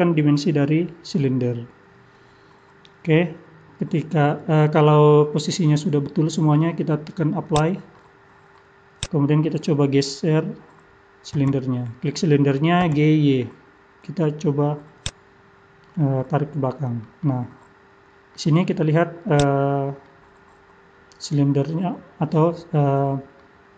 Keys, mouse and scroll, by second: 5.1 middle click, 7.4 click, 7.9 middle click, 9.0 click, 11.4 g, 15.9 middle click, 17.2 middle click, 18.6-19.3 scroll up 2, 19.3 click, 19.7 scroll down 2, 20.1 middle click.